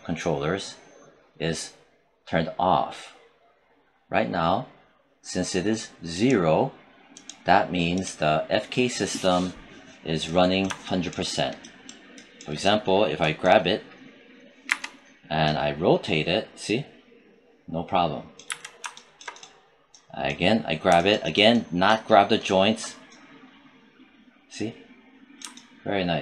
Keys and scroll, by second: 14.4 e, 18.2 z.